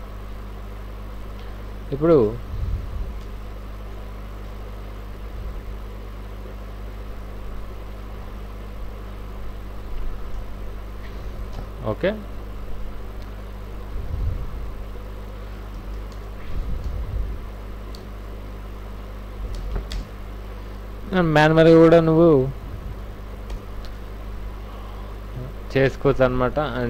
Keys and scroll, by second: 5.3 Right, 6.2 Left, 6.8 Right, 11.5 alt+Tab, 15.7 alt+i, 15.8-16.8 typing, 16.1 Return, 17.9 KP_0, 19.7 Tab, 19.9 KP_0, 23.5 Return, 24.4 alt+t.